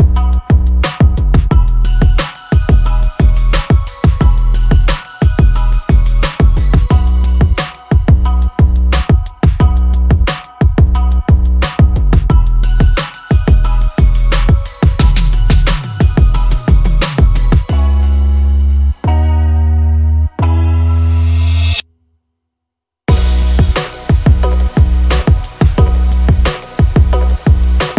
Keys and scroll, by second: 0.4 l, 3.0 p, 4.0-5.9 typing, 6.9 space, 8.0 p, 9.1 Escape, 10.5 space, 10.6 Escape, 11.4 l, 12.9 space, 14.0 q, 15.8-18.8 typing, 20.0 space, 21.1 Delete, 23.0 m, 23.9 Right, 24.4 Left, 25.7 space, 26.0 l, 27.4 Escape.